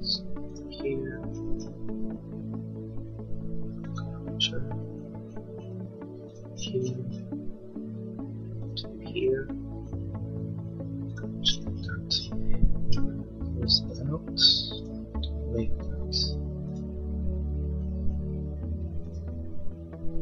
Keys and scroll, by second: 13.1 l, 15.7 Escape, 19.7 Escape.